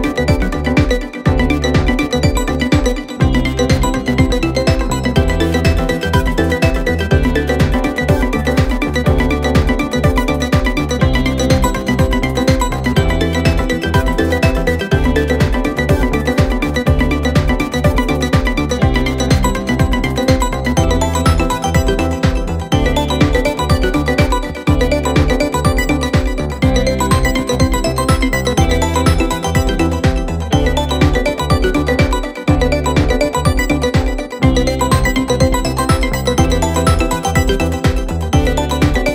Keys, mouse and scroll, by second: 23.3-26.6 drag.